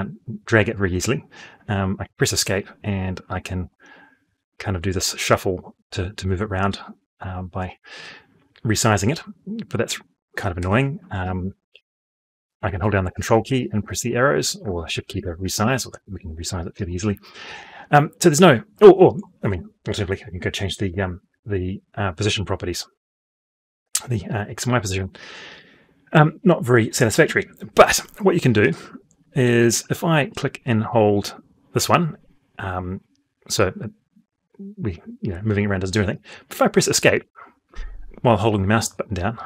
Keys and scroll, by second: 1.6 Escape, 10.2 Escape, 11.1 shift+Right, 12.2 ctrl+Right, 13.4 ctrl+Up, 14.5 shift+Down, 14.8 shift+Right, 15.0 shift+Up, 15.1 shift+Left, 19.1 Escape, 36.8 Escape.